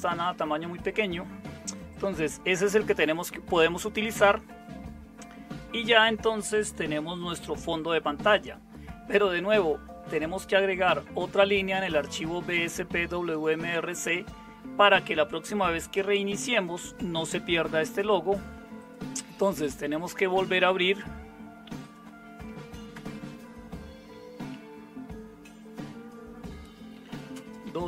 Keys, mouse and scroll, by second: 22.9 super+Return, 26.7-27.8 typing.